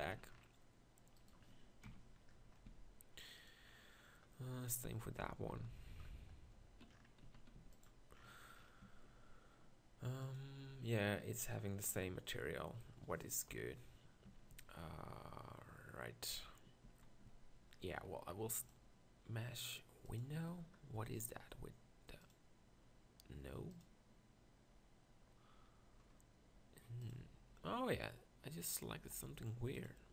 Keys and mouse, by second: 0.2 z, 1.8 ctrl+KP_Decimal, 2.6 z, 5.5 ctrl+l, 7.2 z, 7.6 x, 8.8 Tab, 13.5 KP_1, 14.3 Tab, 14.5 z, 16.8 z, 17.3 Tab, 22.2-25.6 drag, 25.6-27.0 middle drag, 27.0 click, 28.8 click.